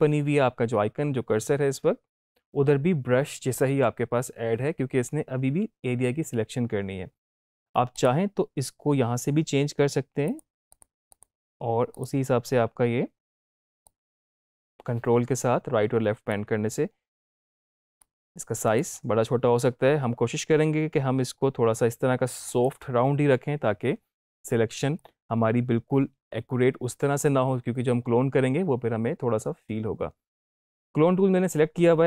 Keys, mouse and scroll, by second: 7.9 click, 10.2 click, 13.8-16.3 ctrl+drag, 18.0-18.9 ctrl+drag, 22.4 click, 24.2-25.1 ctrl+drag.